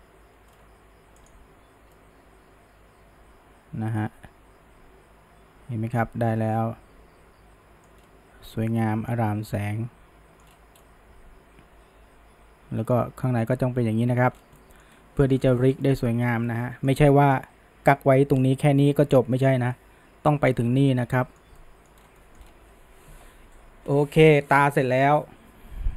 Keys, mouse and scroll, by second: 0.5-1.5 scroll down 1, 1.5 click, 2.0-5.0 middle drag, 8.1-8.8 scroll up 1, 8.8-10.5 middle drag, 10.5-10.8 scroll up 1, 10.8-14.4 middle drag, 14.4 scroll down 1, 14.6-14.9 middle drag, 14.9 scroll up 1, 15.2 middle drag, 15.4 scroll down 1, 15.6-17.0 shift+middle drag, 17.0 scroll up 1, 17.2-20.8 middle drag, 20.8 scroll up 1, 21.0-22.0 middle drag, 22.0 scroll down 1, 22.2 middle drag, 22.4-25.5 scroll up 1.